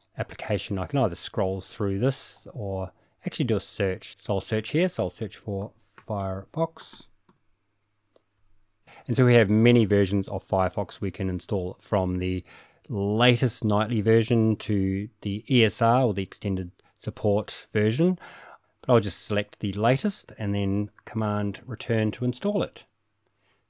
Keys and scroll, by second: 5.5-7.8 typing, 18.4-19.1 typing, 20.8 typing, 22.4 super+Return.